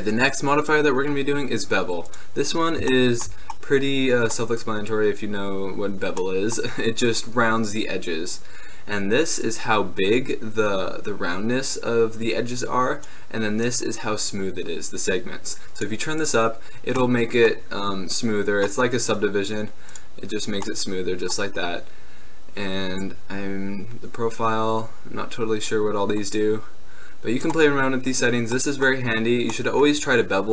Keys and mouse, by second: 2.6-7.9 middle drag, 9.5-11.5 middle drag, 15.9-18.8 middle drag, 20.0-21.4 middle drag, 23.3-25.1 drag, 28.2-30.5 middle drag.